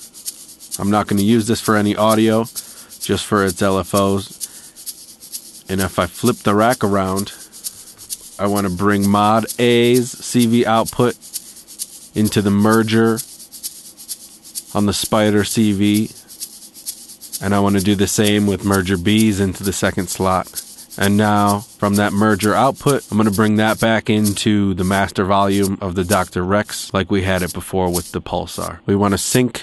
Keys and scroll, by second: 5.8 Tab, 25.0 Tab.